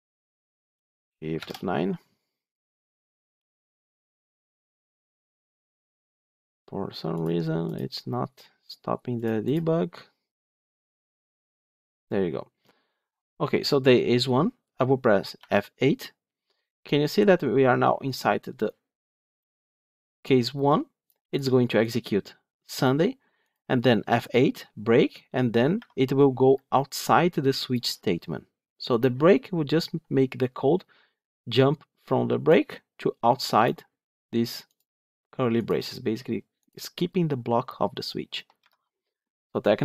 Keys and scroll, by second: 0.3 ctrl+F8, 1.2 shift+F9, 9.4 ctrl+F8, 10.6 ctrl+F5, 15.3 F8, 24.0 F8, 38.5 F9.